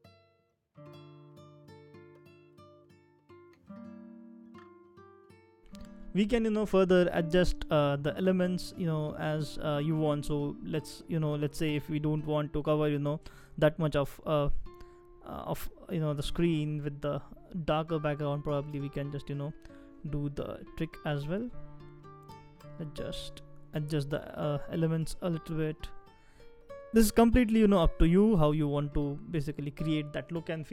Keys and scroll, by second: 2.5 typing, 4.9 typing.